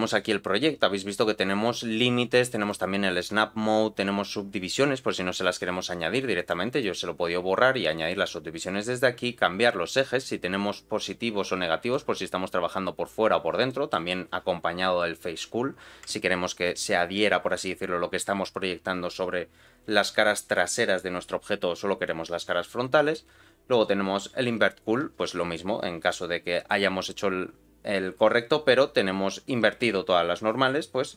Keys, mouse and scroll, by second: 2.6-3.7 drag, 6.3 click, 6.7 click, 11.9 middle click, 12.4-13.6 scroll up 2, 13.6 middle click.